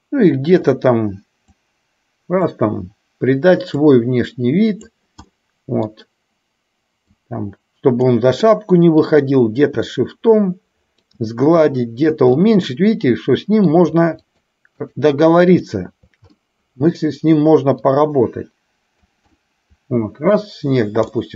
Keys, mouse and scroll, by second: 1.6-2.6 drag, 3.8-4.9 drag, 5.3 middle click, 7.2-8.2 drag, 8.4 middle click, 9.9-11.2 shift+drag, 11.8 shift+click, 12.6-13.8 middle drag, 14.4 shift+click, 14.9 shift+click, 15.7 shift+click, 16.4 middle click, 17.9-19.2 drag, 19.4-20.4 middle drag, 21.2 middle click.